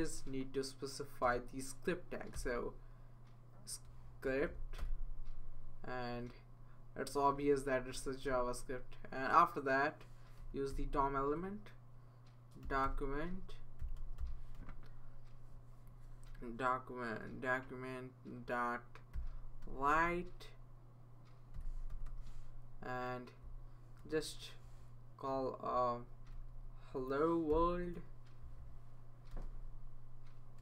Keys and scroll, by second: 1.2 Return, 2.3 s, 4.2 Down, 4.5 Down, 4.8 Return, 7.3 Right, 7.9 Right, 8.3 Right, 10.4-10.7 typing, 12.4-15.0 typing, 18.9-19.9 typing, 21.3-22.5 typing, 23.7-24.5 typing, 25.2 Left, 26.3-30.6 typing.